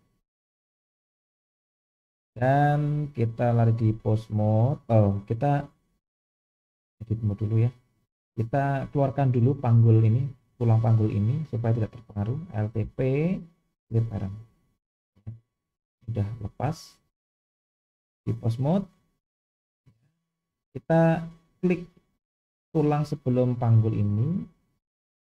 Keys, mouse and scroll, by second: 3.0-4.4 drag, 5.5-6.1 drag, 6.8-7.5 drag, 8.3 click, 12.8 alt+p, 15.5 g, 17.8-18.7 drag, 21.5 click, 25.0 click.